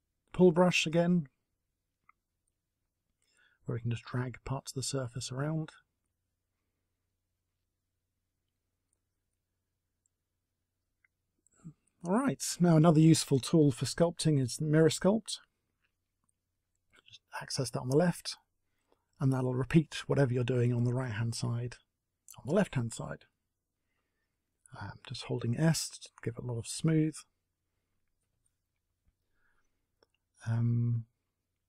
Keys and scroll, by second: 23.8 s, 24.2 s.